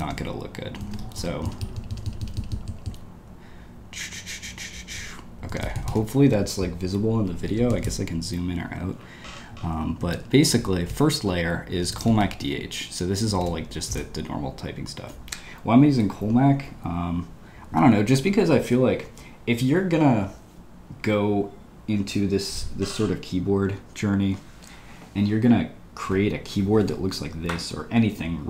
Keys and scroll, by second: 1.1 super+-, 1.4 super+-, 1.6 super+-, 5.6 j, 5.7 j, 5.8 j, 7.5 Escape, 7.7 j, 10.1 ctrl+d, 10.4 ctrl+u, 10.8-13.9 typing.